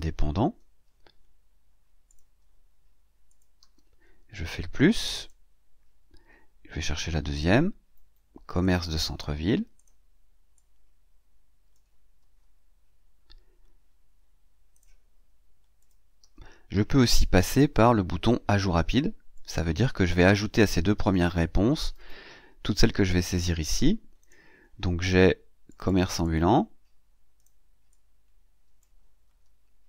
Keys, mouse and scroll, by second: 0.2 ctrl+c, 2.0 click, 3.1 ctrl+click, 3.4 ctrl+v, 5.0 click, 7.2 click, 8.5 click, 9.6 click, 10.4-11.8 drag, 12.1 ctrl+c, 14.6 click, 15.7 click, 16.1 ctrl+v, 16.7 scroll down 2, 19.2 click, 20.9 click, 24.1 click, 25.5 click, 26.1 click, 27.2 click, 27.8 click, 29.1 ctrl+c.